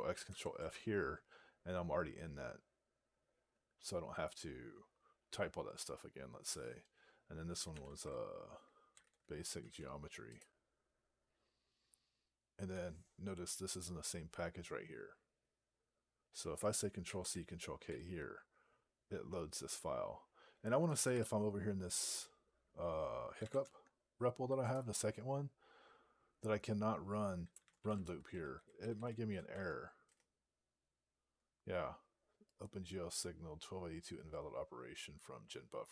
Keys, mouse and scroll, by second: 0.1 ctrl+f, 7.3-8.8 typing, 9.6 Tab, 10.3 Return, 17.7 ctrl+k, 23.0-23.8 typing, 24.5 Return, 29.9 ), 29.9 Return.